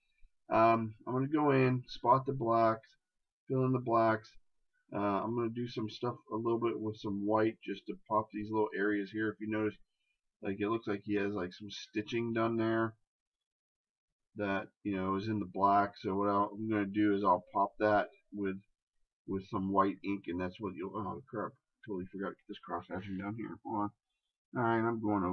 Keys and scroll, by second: 10.2 ctrl+KP_Add.